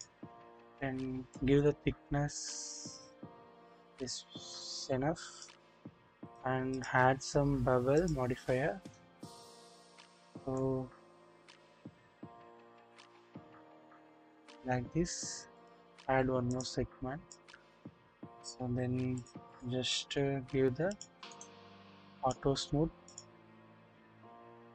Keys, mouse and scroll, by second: 0.0 click, 1.3-5.4 drag, 6.3 click, 8.0 click, 10.6-14.5 drag, 15.5 click, 17.3 click, 18.0 scroll down 1, 19.1-19.5 drag, 20.1-20.7 scroll up 1, 20.9 click, 21.2 scroll up 1, 21.3-22.4 drag, 21.3 right click, 24.0-24.7 drag.